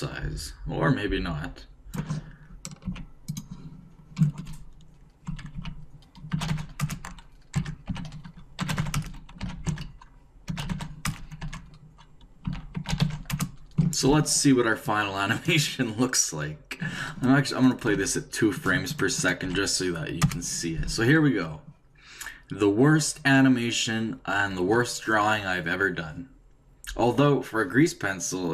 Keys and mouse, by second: 2.8 s, 5.3 Right, 5.5 s, 7.5 Right, 7.9 s, 9.4 s, 11.4 Right, 12.4 s, 16.6 click, 17.6-20.7 drag, 17.8 2.